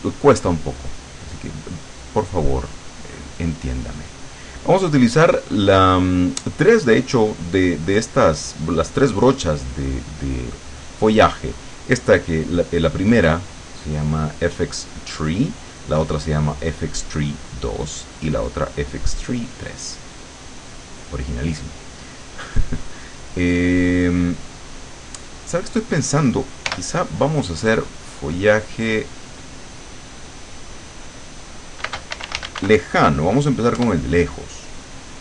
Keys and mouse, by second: 20.5 click, 26.7 l, 27.9 click, 29.4 click, 30.1 click, 31.9 space, 32.1 l, 33.0 o, 33.8 Return.